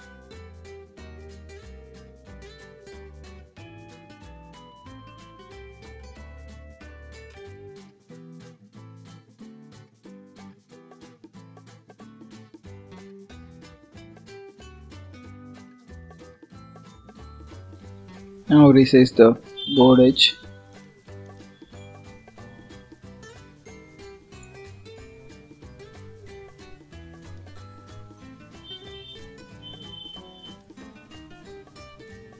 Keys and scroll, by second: 11.6 ctrl+s, 17.7 ctrl+s, 32.1 ctrl+s.